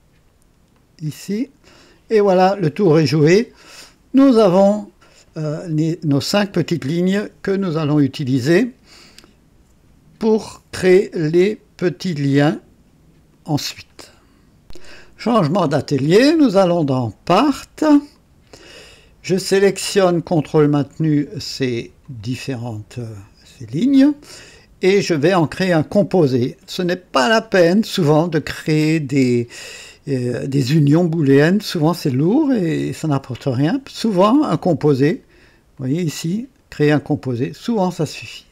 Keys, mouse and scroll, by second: 0.7 click, 16.3 click, 18.1 click, 20.5 ctrl+click, 20.9 ctrl+click, 21.4 ctrl+click, 22.0 ctrl+click, 35.7 click, 37.1 click.